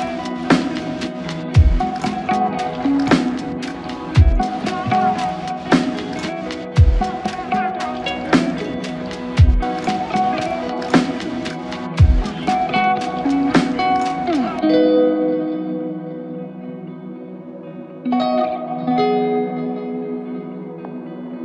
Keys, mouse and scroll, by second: 7.0 typing, 8.6 double click, 12.8 shift+click, 13.8 shift+click, 18.2 alt+shift+click, 21.0 ctrl+alt+click.